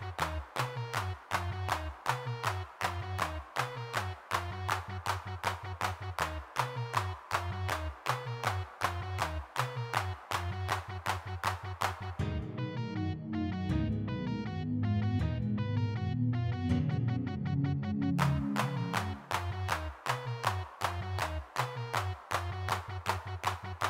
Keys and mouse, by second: 0.0 click, 0.2 click, 0.6-2.1 drag, 2.1 middle click, 2.1 click, 2.3 middle click, 3.0-4.4 drag, 4.4 x, 7.0 middle click, 7.5 middle click, 8.5 g, 8.6-10.0 drag, 8.6 f, 10.0 middle click, 10.8 shift+c, 11.4 f, 11.9 click, 12.4 click, 18.8 3, 20.3-22.0 middle drag, 22.1 middle click, 22.7-23.8 middle drag.